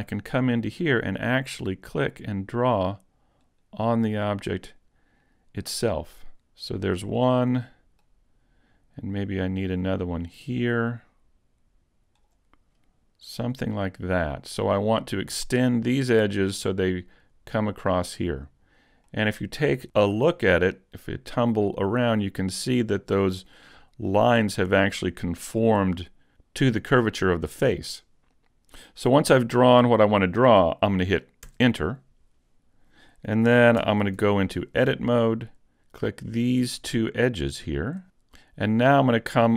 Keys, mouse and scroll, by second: 7.1 middle click, 13.5 middle click, 19.1 middle click, 33.8 ctrl+Tab, 36.2 right click, 37.5 shift+right click.